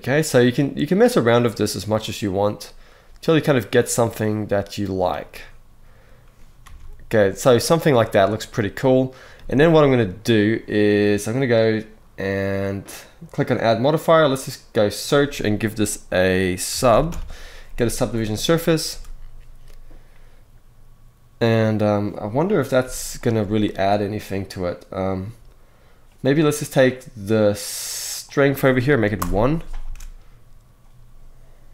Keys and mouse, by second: 7.4 alt+a, 9.7 click, 9.7 space, 18.6 space, 28.0 click, 29.6 space.